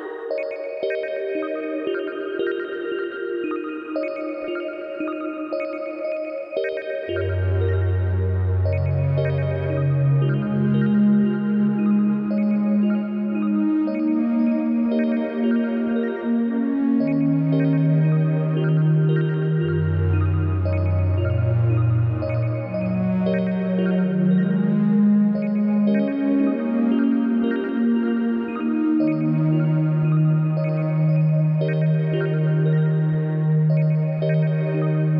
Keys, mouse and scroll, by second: 0.0-3.5 drag, 7.8 click, 10.1 click, 12.2 click, 13.3 click, 13.8 click, 14.6 click, 16.7-18.3 drag, 20.4-22.5 drag, 27.6 click, 29.0 click, 29.3-35.1 drag.